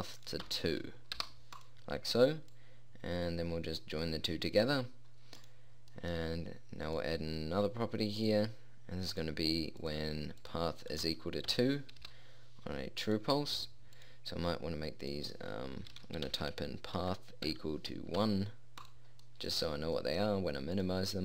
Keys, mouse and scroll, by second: 6.5-7.5 drag, 19.8-21.1 middle drag.